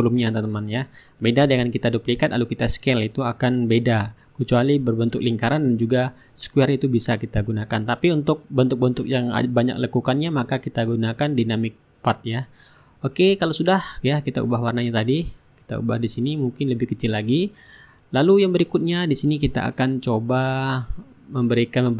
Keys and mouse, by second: 1.4 click, 4.1-7.4 drag, 7.8-9.1 middle drag, 9.3-12.8 ctrl+drag, 11.4-12.8 shift+right drag, 12.4-13.8 middle drag, 14.6 click, 16.1 click, 18.5-21.5 drag.